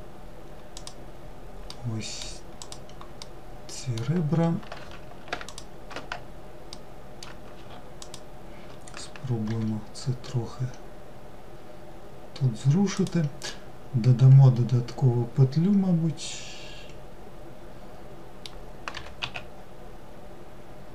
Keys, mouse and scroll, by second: 0.8 alt+middle click, 1.7 alt+click, 2.3 alt+middle click, 4.6 shift+click, 5.8 alt+middle click, 7.1 shift+click, 12.5-15.6 middle drag.